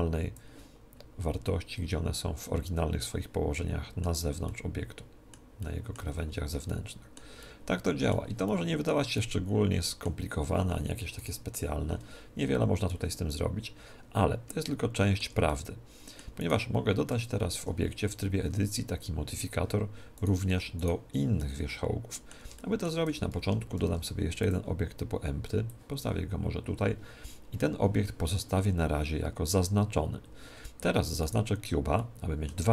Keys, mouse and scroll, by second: 1.0-3.2 middle drag, 4.5-11.0 middle drag, 11.2 right click, 11.5 g, 13.7-17.3 middle drag, 16.4 right click, 17.6 Tab, 18.4 Tab, 20.2-22.6 right drag, 21.4-24.4 middle drag, 23.1 Tab, 23.8 shift+a, 25.7-27.9 drag, 31.2 right click, 32.0-32.7 middle drag.